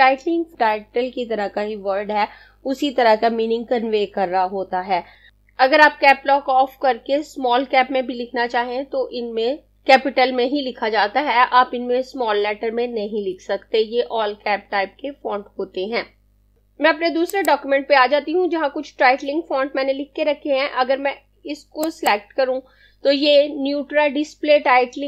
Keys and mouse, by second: 17.3 click, 21.8 click.